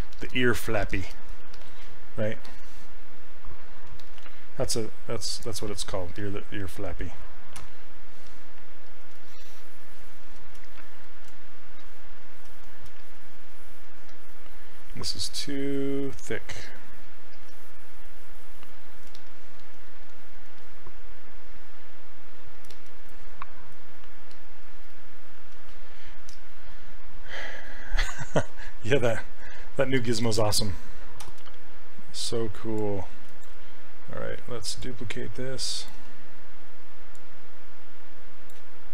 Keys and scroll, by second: 7.6 q, 8.3 s, 31.3 e.